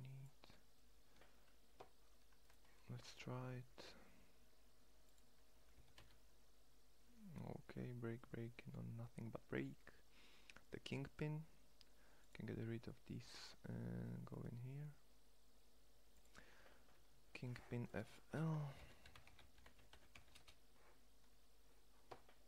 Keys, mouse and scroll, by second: 5.4 g, 6.6-8.6 drag, 11.8-13.4 drag, 21.2 middle click.